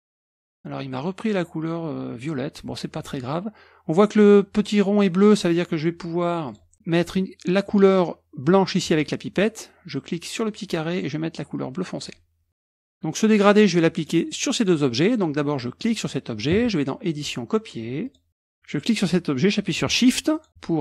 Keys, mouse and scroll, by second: 6.5 click, 8.8 click, 10.5 click, 12.0 click, 12.9 click, 14.0-14.6 drag, 15.0 drag, 15.8 click, 17.2 click, 18.1 click, 18.8 click, 20.3 shift+click.